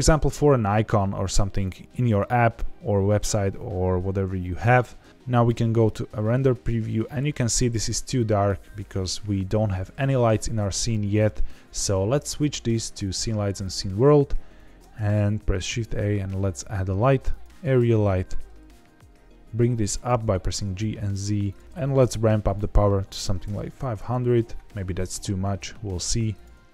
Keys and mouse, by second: 5.1 z, 5.5 z, 10.5 z, 12.1 click, 14.5 shift+a, 17.8 g, 17.9 z, 19.9 click, 21.4 click, 21.6 KP_0, 21.6 BackSpace, 22.4 click, 23.7 KP_0, 24.9 g, 25.0 z, 26.3 click, 26.5 z.